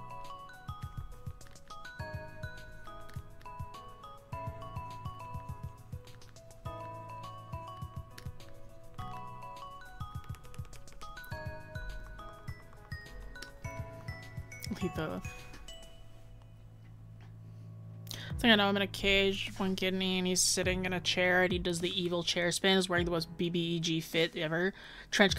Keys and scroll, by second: 10.3 scroll down 1.